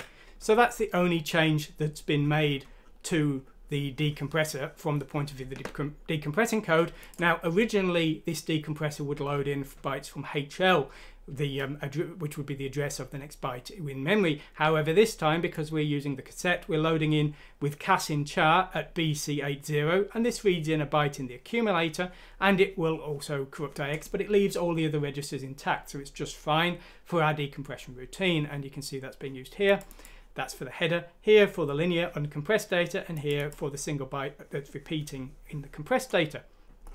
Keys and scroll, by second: 0.2 k.